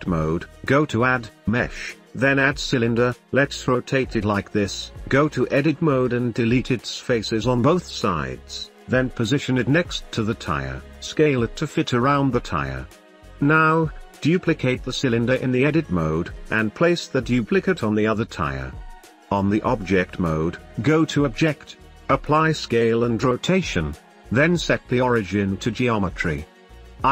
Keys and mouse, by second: 1.4-3.1 drag, 3.7 click, 4.3 click, 5.3 n, 5.5 Tab, 5.6 middle click, 6.0 middle click, 6.3 shift+middle click, 7.1 x, 7.5-8.2 middle drag, 8.0 shift+Tab, 8.7-9.2 middle drag, 10.7 shift+middle click, 11.5 s, 11.5 shift+middle click, 11.7 shift+middle click, 12.0 s, 12.0 y, 12.1 click, 12.6 s, 13.0 Tab, 13.3 click, 14.3 shift+d, 16.4 shift+middle click, 16.9 g, 17.3 click, 17.5 shift+middle click, 17.7 middle click, 18.0 middle click, 18.5 click, 18.9 Tab, 20.3 middle drag, 21.0 shift+middle click, 21.8 right click, 22.2 click, 23.1-24.0 drag, 25.7 middle click, 27.0 click.